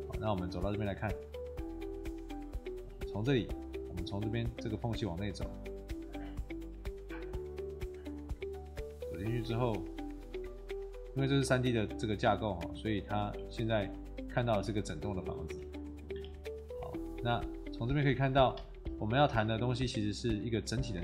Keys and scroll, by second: 3.0 q, 5.9 a, 15.5 q, 16.2 e, 18.4-19.3 typing.